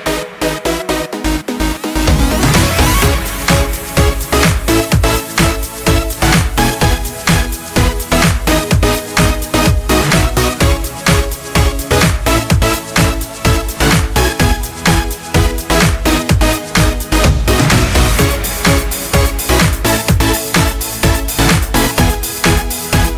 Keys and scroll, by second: 0.0 ctrl+space.